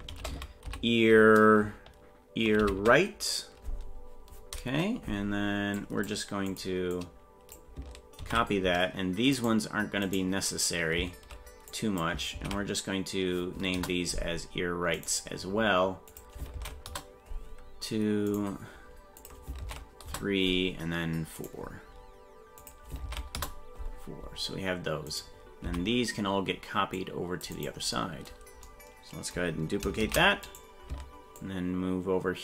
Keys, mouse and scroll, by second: 6.5-9.5 drag, 10.1 right click, 11.7-14.1 drag, 15.0 right click, 16.1-17.3 drag, 18.3 right click, 19.2-20.4 drag, 21.4 right click, 22.6-23.7 drag, 25.1 right click, 25.6 c, 30.0 shift+d, 31.4-32.4 ctrl+drag.